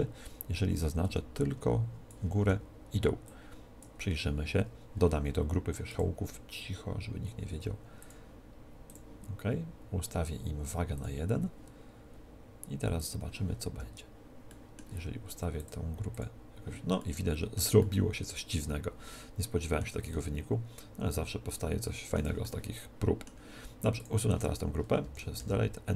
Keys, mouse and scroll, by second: 0.8 a, 2.3 b, 2.5 b, 5.9 click, 8.0-14.7 drag, 13.7 Tab, 14.5 right click, 14.7 middle click, 15.6 click, 17.4-22.3 middle drag, 17.6-19.5 drag, 17.6-19.5 right drag, 20.1-21.7 drag, 20.1-21.7 right drag, 22.4-24.0 middle drag, 24.0 click.